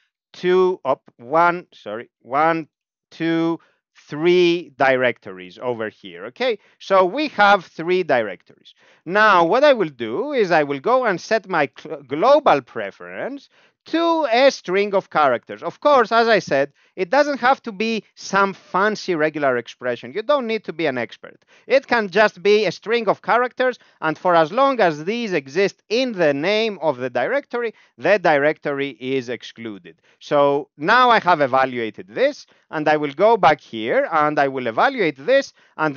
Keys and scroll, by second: 0.7 BackSpace, 1.1 ., 1.7 BackSpace, 2.7 ctrl+alt+f, 3.8 ctrl+alt+f, 5.4 Home, 7.1 Up, 7.3 Up, 7.5 Up, 7.6 Up, 7.8 Up, 7.9 Up, 8.1 Up, 8.3 Up, 8.6 Down, 8.8 Down, 9.6 End, 9.7 Left, 10.2-13.2 typing, 15.8 Left, 21.4 Left, 21.5 Left, 21.7 Left, 21.8 Left, 22.1 Right, 22.3 Right, 22.4 Right, 22.6 Right, 28.3 Right, 28.5 Right, 28.8 Right, 29.5 Left, 30.1 ctrl+j, 31.2 Down, 31.4 Down, 31.5 Down, 31.7 Down, 31.8 Down, 32.0 Down, 32.1 Down, 32.3 Down, 32.5 Up, 32.6 Up, 32.8 Up, 33.5 End, 34.2 ctrl+j.